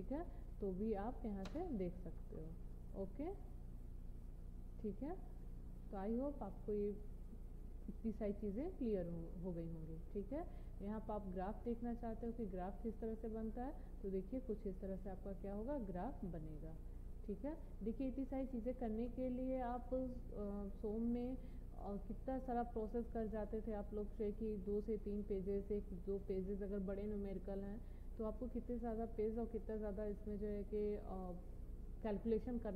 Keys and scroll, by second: 1.6 Return.